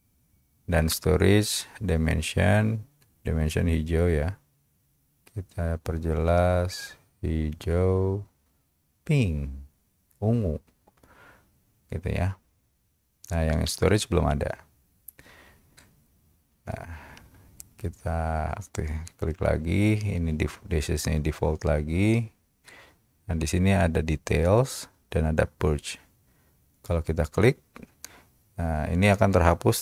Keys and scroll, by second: 15.3 Escape.